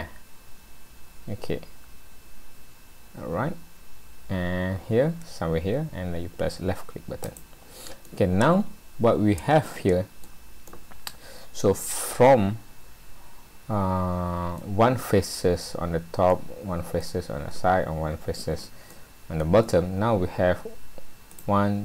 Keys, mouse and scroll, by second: 8.0 middle click, 10.7 middle click, 16.3 middle click, 18.9 middle click, 19.8 scroll down 1, 20.1-20.6 scroll up 2, 21.4 click.